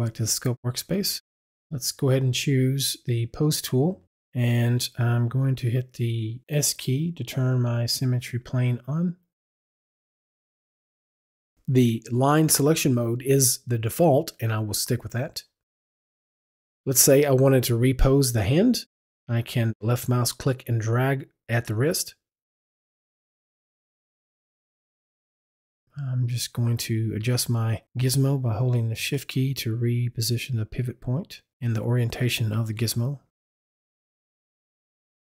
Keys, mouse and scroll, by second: 3.3 click, 7.3 click, 7.8 s, 9.3 s, 10.5 click, 11.8 click, 13.8 click, 16.7 click, 19.9 click, 28.8 shift+click, 31.5 click.